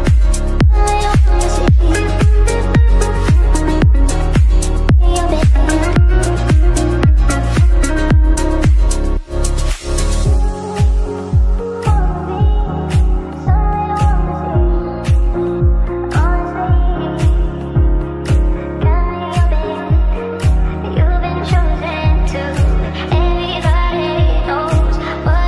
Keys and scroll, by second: 0.8 ctrl+q.